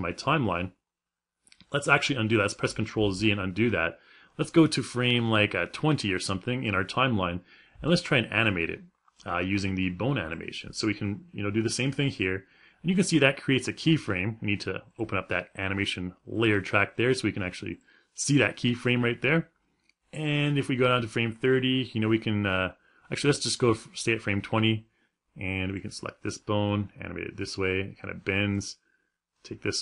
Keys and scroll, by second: 3.1 ctrl+z.